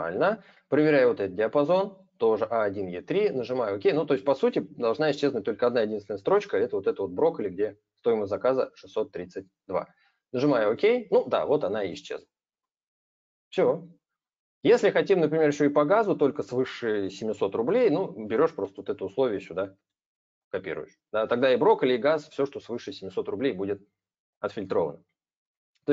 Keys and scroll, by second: 18.7 ctrl+c, 19.4 ctrl+v.